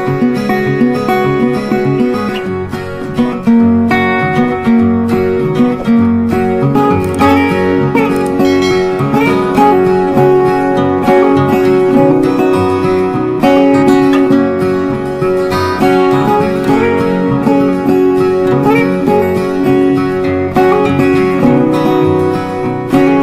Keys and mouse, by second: 1.9 click, 6.9 click, 9.0-12.0 typing, 12.3 ctrl+a, 13.6-23.2 drag.